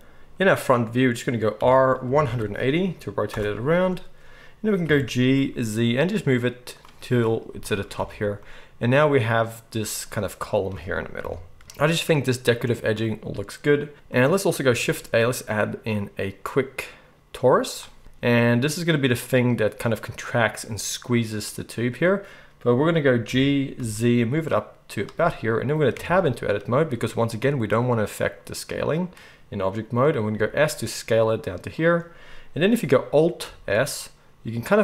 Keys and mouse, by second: 1.6 r, 4.8 g, 7.1-9.9 middle drag, 8.0 alt+a, 9.9 click, 10.0-34.8 middle drag, 11.2 KP_1, 14.7 shift+a, 23.2 g, 25.9 Tab, 30.3 s, 33.4 alt+s.